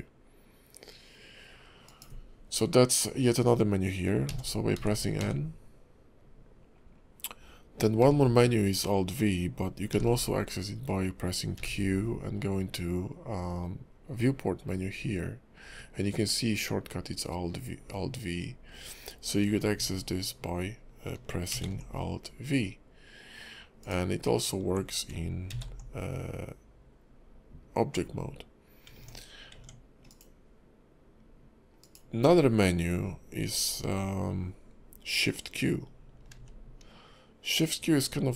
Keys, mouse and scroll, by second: 4.3 n, 4.7 n, 5.2 n, 8.0 q, 9.9 q, 11.5 q, 21.5 alt+v, 23.8 click, 25.5 alt+v, 28.9 Tab, 29.5 Tab, 30.1 click, 31.8 click, 36.3 shift+q.